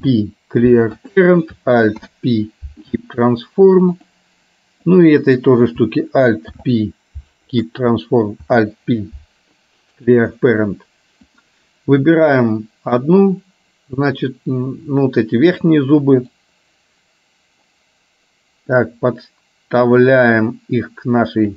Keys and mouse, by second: 0.0 alt+p, 2.0 alt+p, 5.0 click, 10.4 alt+p, 11.5 click, 16.5-18.9 drag, 20.2-21.5 drag.